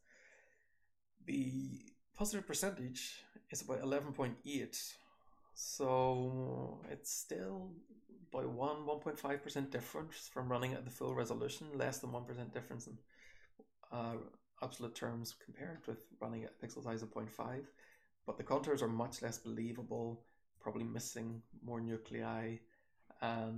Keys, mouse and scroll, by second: 0.4-5.7 scroll up 1, 5.7-8.9 scroll up 1, 8.9-9.7 scroll down 1, 9.7 click, 9.7-12.0 scroll down 1, 9.9 h, 10.4 h, 11.5-12.0 drag, 12.0-13.1 scroll down 1, 13.1-14.0 drag, 13.1-14.0 scroll down 1, 14.0-15.7 scroll down 1, 15.7-16.4 scroll up 1, 16.4-17.7 scroll up 1, 17.7 click, 17.7-19.0 scroll up 1, 18.2 h, 19.0-20.0 scroll up 1, 19.0 h, 20.0-20.5 drag, 20.0-22.5 scroll up 1, 20.5 h, 21.3-21.8 drag, 22.0 h, 22.5-23.5 scroll down 1.